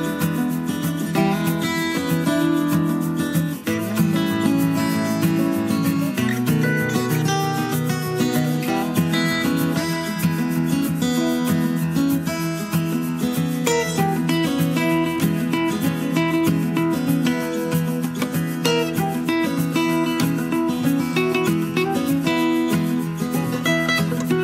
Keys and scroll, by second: 2.4 Escape, 16.6 Escape.